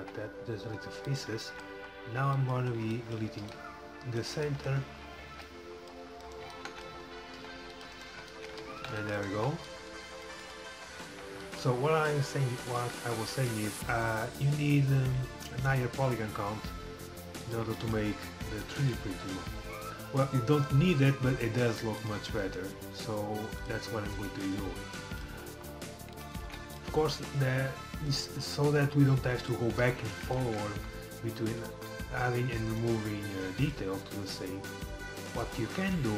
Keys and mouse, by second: 0.0 x, 3.5 c, 4.4 click, 5.4 c, 6.7 click, 7.4 c, 9.0 c, 9.4 x, 10.3 click, 14.0-16.3 middle drag, 16.3 g, 20.6-22.1 drag, 20.9 g, 22.7 g, 24.5 g, 26.4 ctrl+z, 26.8 click, 29.1 click, 33.0 g, 34.6 g.